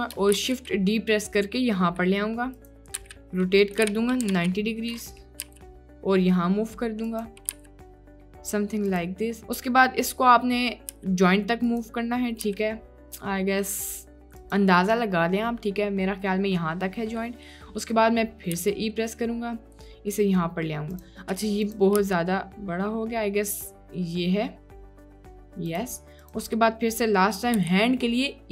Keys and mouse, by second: 0.4 shift+d, 3.0 r, 3.9 r, 5.5 g, 7.6 g, 10.9 g, 12.5 g, 18.7 e, 21.7 click, 22.0 g, 27.6 e.